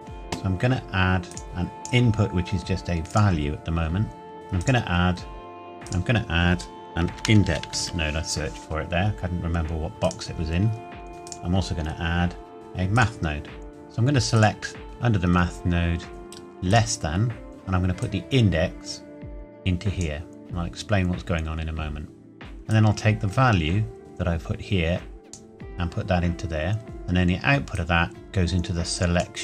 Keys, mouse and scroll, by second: 1.3 click, 4.6 click, 5.9 click, 7.1-7.8 typing, 10.0 click, 11.1 Delete, 11.3 click, 16.7 click, 18.0 click, 22.7 click, 26.8-27.7 scroll down 1, 27.8 click.